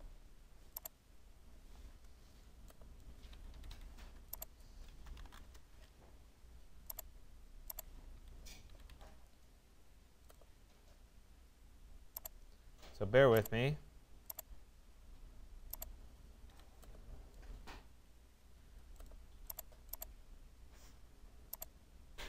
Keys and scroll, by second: 1.5 Return, 3.5 Escape, 5.5 Return, 8.2 Escape.